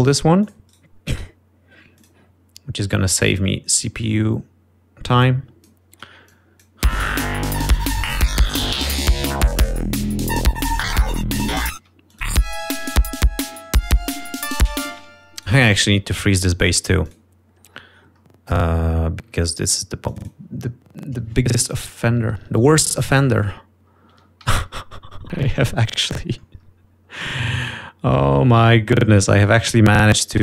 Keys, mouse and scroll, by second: 0.3 right click, 1.4 click, 1.6 right click, 2.9 click, 6.1 click, 7.2 click, 7.8 space, 8.4-9.5 ctrl+scroll down 6, 11.3-11.9 scroll down 4, 12.3 ctrl+scroll up 2, 12.7 ctrl+space, 13.0 ctrl+click, 15.8 space, 16.3 scroll up 1, 18.0 click, 18.5-19.9 scroll down 6, 21.0 click, 21.4-21.8 scroll up 2, 22.5 ctrl+Up, 24.6 ctrl+Up, 25.0 ctrl+Down, 26.6 scroll down 2, 27.0 scroll up 2, 27.6 scroll down 2, 29.1 click, 29.9 click.